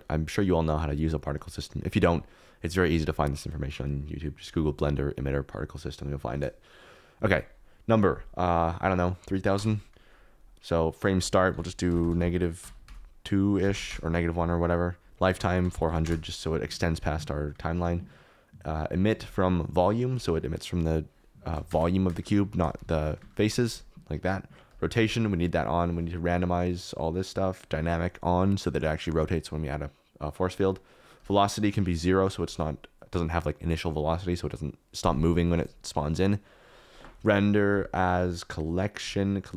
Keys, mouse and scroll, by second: 1.3 click, 7.9-10.1 drag, 11.1-13.9 drag, 11.9 BackSpace, 15.1 click, 15.8 0, 17.5 click, 17.6-19.3 middle drag, 20.2 middle click, 20.9-22.2 middle drag, 21.6 space, 22.2 space, 22.5 shift+middle click, 22.9 shift+Left, 23.1 space, 23.5 space, 26.7 click, 26.9 click, 27.5 click, 31.2 click, 36.3 click, 38.2 click.